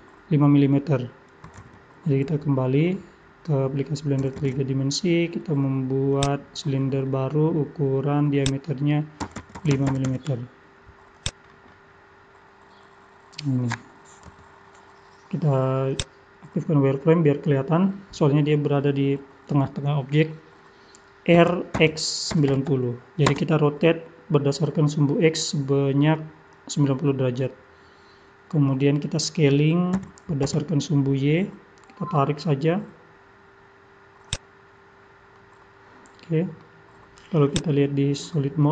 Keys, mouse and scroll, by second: 2.8 middle click, 4.4 shift+a, 6.8-8.4 scroll down 20, 8.4 click, 8.4-10.7 scroll down 2, 11.5 middle click, 11.5-14.3 scroll up 15, 11.7 middle click, 14.3 scroll up 2, 14.3 KP_3, 16.0 click, 17.0-18.0 scroll up 6, 18.0-18.5 scroll down 2, 18.4 scroll up 1, 21.4 r, 29.9 s, 34.8 scroll down 2, 35.4 middle click, 35.4 scroll down 4, 37.5 click, 38.1 scroll up 3, 38.6 middle click.